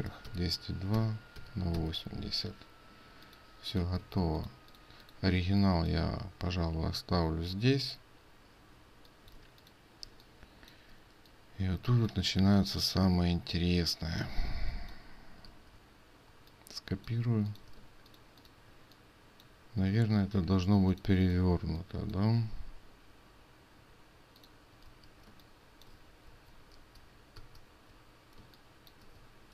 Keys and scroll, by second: 15.5 ctrl+z, 17.8 ctrl+space, 24.9 ctrl+z, 26.4 ctrl+c.